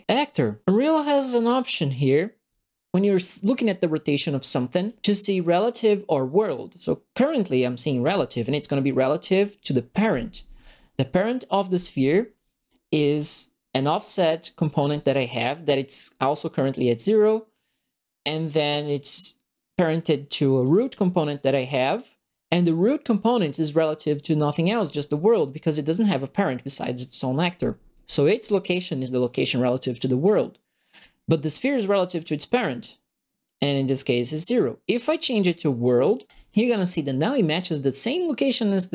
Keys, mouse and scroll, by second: 0.0 click, 15.8 click, 20.6 click, 30.9 click, 34.8 click, 36.2 click.